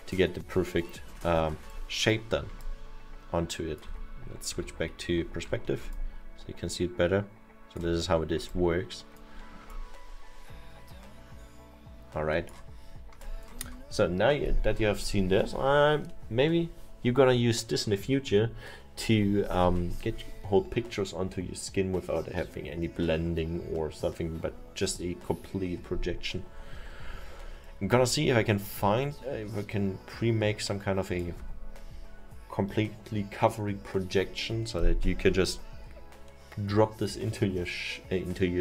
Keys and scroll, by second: 4.6 F5.